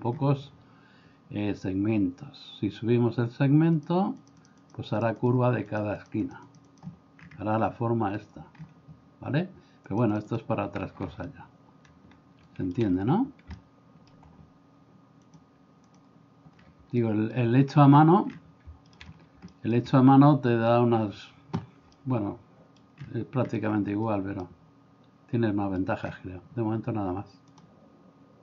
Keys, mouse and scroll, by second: 3.8 click, 4.2 click, 4.7 click, 5.1 click, 5.7 click, 9.9 click, 11.4-12.7 shift+middle drag, 13.8 middle click, 15.3 click, 17.0 shift+middle click, 18.9 shift+middle click, 19.6 shift+middle click, 22.0 middle click, 24.4-25.8 middle drag.